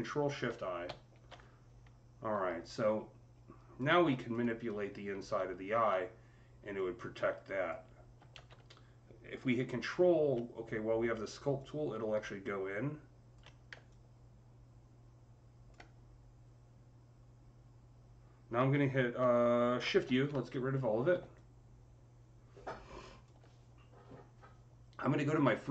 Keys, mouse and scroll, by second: 0.1-1.2 typing, 0.3-6.5 alt+drag, 6.6-11.4 alt+drag, 6.6 typing, 8.2 ctrl+z, 11.4 ctrl+z, 11.4-18.2 ctrl+drag, 18.6 ctrl+z, 18.6-21.2 ctrl+drag, 18.6 typing, 19.9 u, 21.2-25.7 alt+drag.